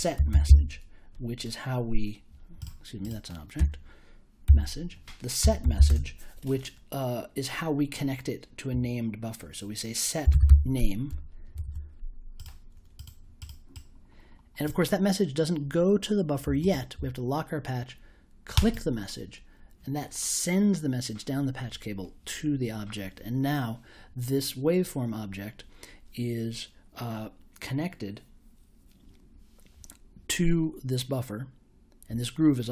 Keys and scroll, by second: 0.0-0.9 typing, 3.5-6.2 typing, 9.9-10.9 typing, 11.5 super+j.